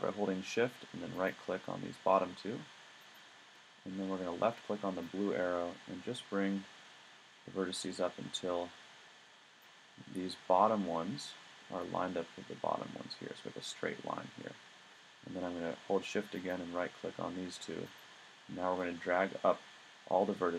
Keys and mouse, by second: 1.2-4.8 middle drag, 5.1 click.